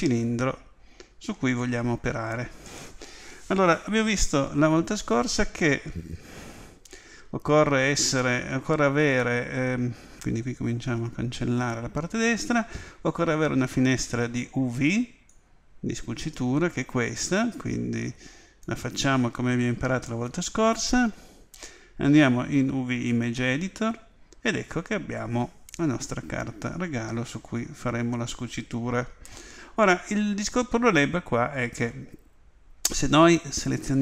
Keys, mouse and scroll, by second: 10.6 n, 15.3-17.1 drag, 20.0 click, 24.0-26.2 middle drag, 33.9-34.0 right drag.